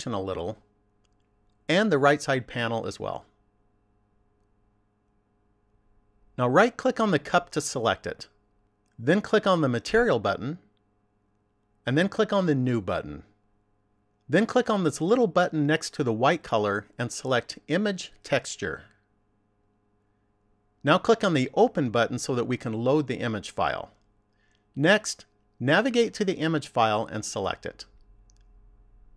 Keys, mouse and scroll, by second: 3.5 click, 6.4 right click, 12.9 click, 17.7 click.